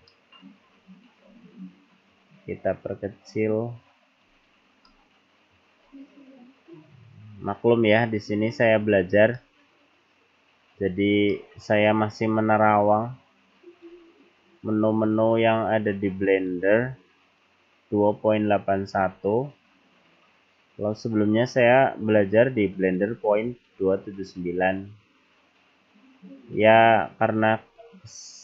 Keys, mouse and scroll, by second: 0.1 middle click, 0.8-1.5 scroll up 9, 2.1 click, 4.5-5.0 scroll down 2, 5.0 middle click, 5.9-6.3 scroll down 2, 7.6 click, 9.4 middle click, 11.3 middle click, 12.9 click, 15.3 click, 17.4 click, 19.3-20.4 scroll down 4, 21.0 scroll up 1, 21.9 click, 23.5-24.0 scroll down 2, 24.0-24.7 scroll up 2, 26.7 click.